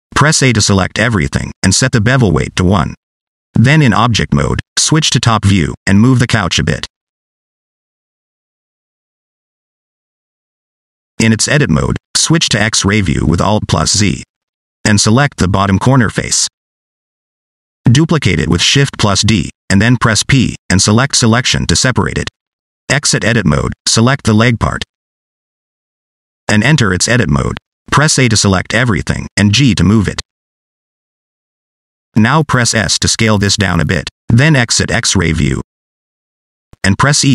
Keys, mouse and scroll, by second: 2.1 a, 2.7 click, 4.1 Tab, 4.2 middle click, 5.9 click, 6.4 scroll down 1, 6.6 shift+middle click, 7.0 click, 8.7-9.4 scroll up 1, 10.3 middle click, 11.1 Tab, 11.3 shift+middle click, 11.9 alt+z, 12.1-12.4 scroll up 3, 12.4 middle click, 12.9 shift+middle click, 13.1 middle click, 13.4 click, 13.6-13.9 scroll up 3, 14.1 middle click, 15.7 click, 18.3 shift+d, 19.5 p, 22.2 Tab, 24.0 click, 26.2 click, 26.7 scroll down 2, 27.0 shift+middle click, 28.0 Tab, 29.1 a, 30.0 g, 31.2 s, 31.7 scroll up 2, 32.0 s, 33.6 scroll down 2, 34.6 alt+z, 36.1 middle click, 36.8 shift+middle click, 37.1 middle click.